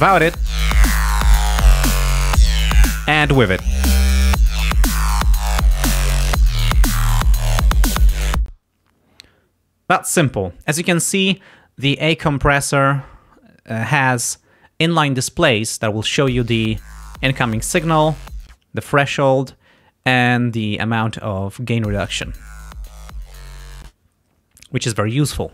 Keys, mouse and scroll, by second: 0.4 click, 3.7 click, 8.5 space, 16.3 space, 18.4 space, 21.9 space, 23.8 space.